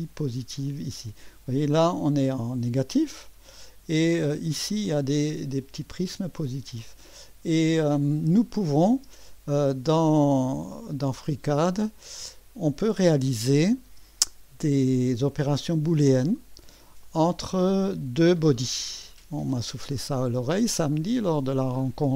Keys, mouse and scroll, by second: 0.7 space, 1.3-2.6 scroll up 1, 3.3 space, 4.0 click, 4.6 space, 4.9 click, 5.3 click, 5.8 middle click, 7.0 space, 8.7 click, 9.1 space, 10.2-11.6 scroll down 1, 11.6 click, 12.1 space, 12.2-13.3 drag, 13.6 right click, 14.0 space, 14.2-15.3 drag, 15.3 right drag, 15.4 click, 15.9-16.8 drag, 16.4-17.6 middle drag, 17.1-18.6 drag, 19.3-22.1 scroll up 1.